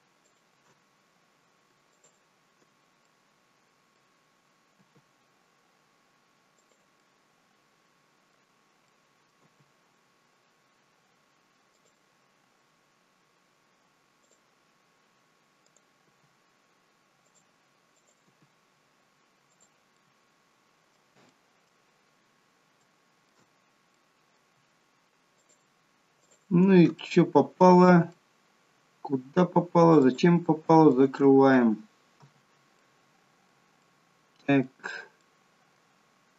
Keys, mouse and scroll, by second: 0.3 shift+click, 1.9 shift+click, 3.1 middle click, 4.7 g, 7.0 middle click, 8.9 middle click, 9.4 g, 14.2 click, 15.7 click, 16.1 g, 18.0 click, 18.3 g, 19.9 middle click, 21.3 middle click, 22.1 scroll up 3, 22.8 shift+middle click, 23.0 shift+middle click, 23.5-24.0 scroll up 2, 24.0 middle click, 25.4 shift+click, 26.2 shift+click, 27.0 middle click, 28.1 middle click, 30.1 shift+click, 30.9 shift+click, 32.2 f, 32.9 middle click, 33.8 middle click, 35.2 middle click, 36.1 scroll up 3.